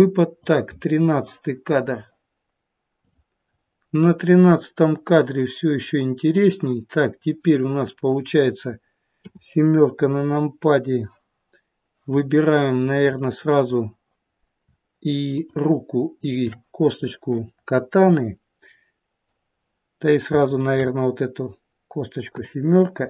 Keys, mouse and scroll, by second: 2.9 click, 3.5-4.8 scroll up 2, 6.2 click, 7.4 middle click, 9.1 KP_7, 12.0 middle click, 13.1 middle click, 15.2 shift+click, 16.1 shift+click, 20.3 shift+click, 22.3 KP_7.